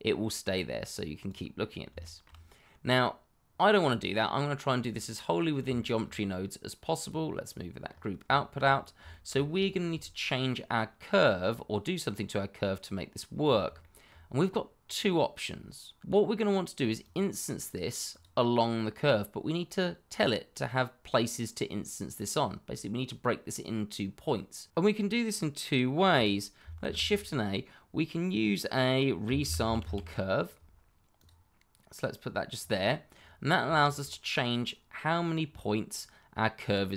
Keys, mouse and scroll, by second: 0.4 click, 1.6-2.0 scroll down 1, 2.0 shift+middle click, 2.8-3.4 scroll up 1, 3.4-3.8 scroll down 1, 5.7 shift+middle click, 7.0 click, 7.8-8.2 scroll up 1, 8.3 shift+middle click, 8.6-9.1 scroll up 1, 9.1 shift+middle click, 10.3 scroll down 1, 13.3 scroll down 1, 13.8 shift+middle click, 17.0 click, 26.8 shift+a, 29.2-29.9 typing, 31.1 click, 33.1-33.6 scroll up 1, 33.9 shift+middle click, 34.5 scroll up 1.